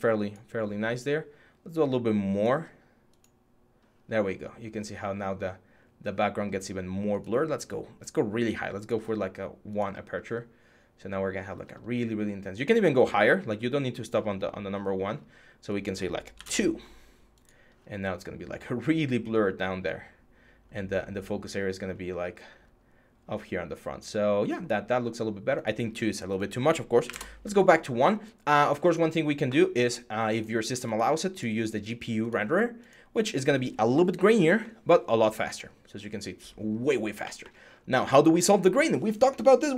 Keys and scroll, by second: 16.1 2, 26.8 1.